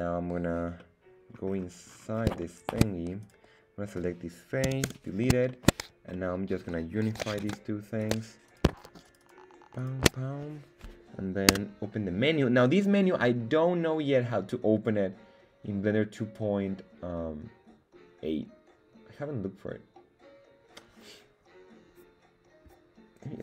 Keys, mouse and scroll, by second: 0.8 middle click, 1.5-1.9 scroll down 2, 1.9-2.3 scroll up 3, 2.6 shift+middle click, 3.4 right click, 4.6 x, 5.5 shift+middle click, 6.1 middle click, 9.0 alt+shift+right click, 9.2 alt+shift+right click, 9.8 alt+shift+right click.